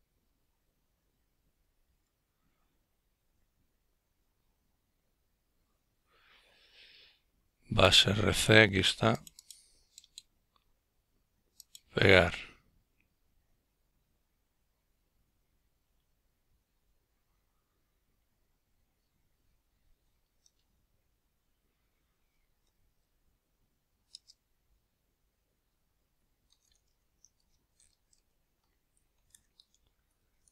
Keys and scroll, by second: 14.0 Return, 16.7-20.2 typing, 20.6 Return, 22.2-23.3 Down, 23.0-24.9 typing.